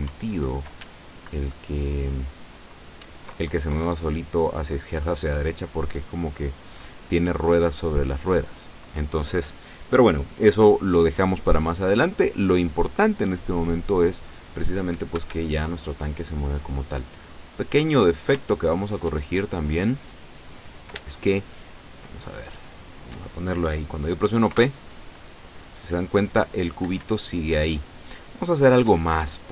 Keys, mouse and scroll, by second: 0.9 s, 3.4 Left, 3.9 Right, 15.3 Escape, 16.7-17.9 drag, 18.1-18.4 scroll up 1, 18.5-20.2 shift+drag, 21.2-22.4 shift+drag, 22.7 shift+right click, 24.5 p, 27.0 Escape, 27.6 scroll down 2, 28.1 scroll down 2, 28.2 click, 29.0-29.3 scroll down 2.